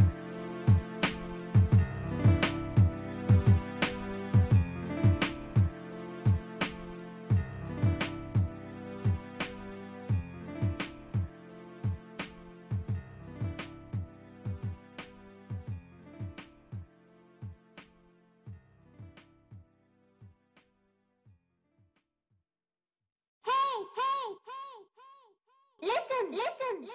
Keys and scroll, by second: 11.8 [, 13.8 ctrl+z, 18.5 [, 18.6 ], 19.8 ], 20.1-20.6 scroll up 2, 20.2 ctrl+z, 20.3 ], 20.6 ctrl+z.